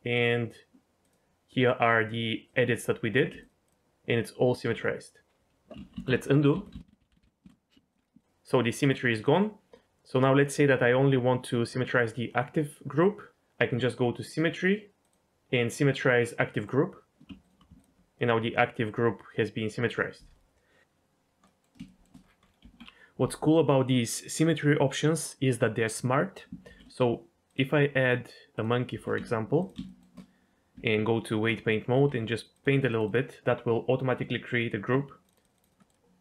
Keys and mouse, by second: 1.0 ctrl+click, 1.6 ctrl+click, 2.5 ctrl+click, 5.8 ctrl+z, 5.9 ctrl+z, 6.1 ctrl+z, 6.5 ctrl+z, 6.7 ctrl+z, 6.9 ctrl+z, 7.0 ctrl+z, 7.1 ctrl+z, 7.2 ctrl+z, 7.9 ctrl+click, 8.2 ctrl+click, 8.8 ctrl+click, 9.2 ctrl+click, 14.3-16.7 drag, 21.4 middle click, 21.9 shift+middle click, 22.6 Tab, 26.7 shift+a, 28.9 g, 29.2 z, 29.6 click, 29.8 shift+middle click, 30.7 Tab, 32.1 f, 32.5 click, 32.7 click, 32.9 click, 35.2 click, 35.4 click, 35.8 middle click, 35.9 middle click.